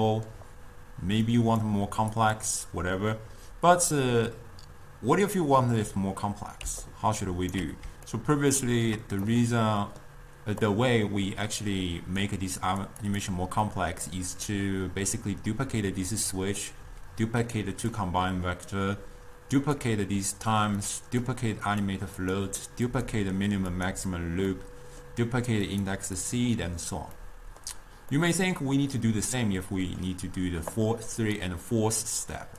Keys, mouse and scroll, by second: 1.5 click, 2.5 click, 3.9 click, 6.7 d, 6.9 right click, 7.7 d, 8.2-10.7 ctrl+middle drag, 10.7 click, 12.7 click, 13.1 click, 13.9-17.7 middle drag, 17.7-18.4 drag, 18.4-19.7 middle drag, 19.7 click, 20.9 click, 21.8 drag, 22.3 click, 23.0 click, 23.8 click, 24.6-25.7 middle drag, 25.7 click, 26.3 click, 27.2-30.8 middle drag, 30.8-32.5 drag.